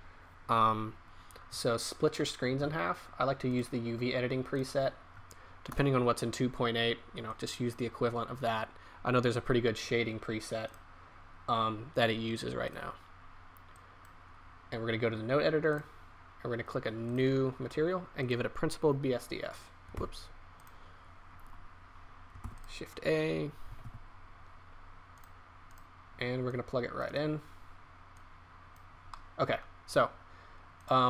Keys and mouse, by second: 3.5 middle click, 5.7 KP_0, 13.8-16.9 drag, 17.6-20.2 drag, 20.2 Delete, 20.2 ctrl+z.